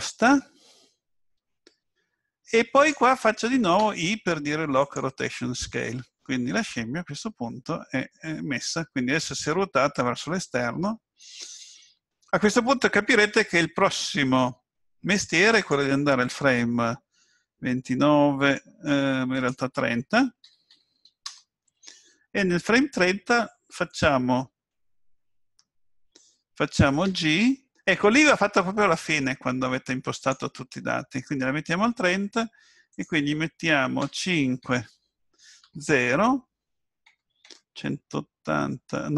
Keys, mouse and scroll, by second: 3.8 i, 15.5 click, 19.3 click, 27.0 g, 32.9 click.